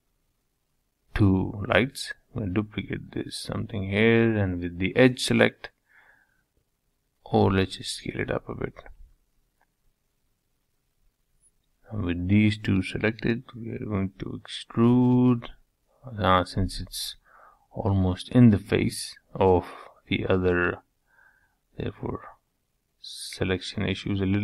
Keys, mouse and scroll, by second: 0.3 shift+d, 3.8 g, 4.8 s, 9.5 3, 9.9 shift+click, 10.3-12.7 middle drag, 12.9 click, 13.5 click, 13.9 click, 14.5 click, 15.0 click, 15.5 scroll up 4, 15.8 shift+middle click, 16.2-16.8 scroll down 1, 16.8-17.8 drag, 17.8 2, 18.5 click, 19.2 g, 21.6 1, 22.1 click, 22.3-22.8 scroll down 1, 22.8 g.